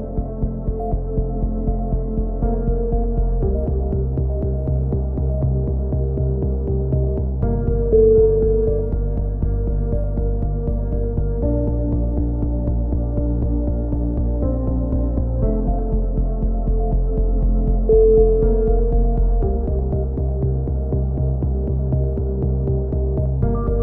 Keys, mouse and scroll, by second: 0.3 e, 1.1 click, 3.5 ctrl+l, 4.0 ctrl+i, 4.3 h, 4.8-6.0 drag, 6.6 x, 8.3 click, 9.1 middle click, 9.5-11.3 right drag, 11.8 a, 12.3 ctrl+f, 13.1 ctrl+r, 13.8-15.8 drag, 16.0 s, 20.4 a, 21.7 ctrl+h, 23.1 shift+h.